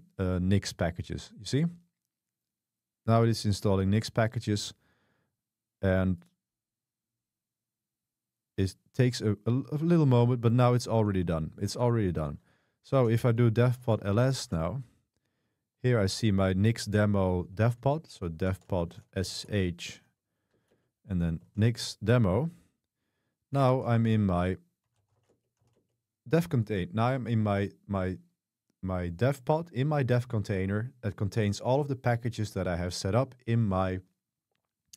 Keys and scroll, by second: 12.8-14.6 typing, 18.2-22.1 typing, 23.5-26.2 typing.